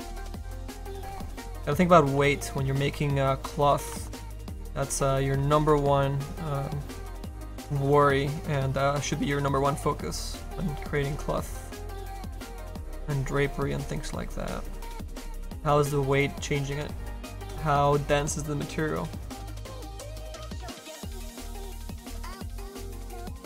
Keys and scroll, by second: 8.2 s.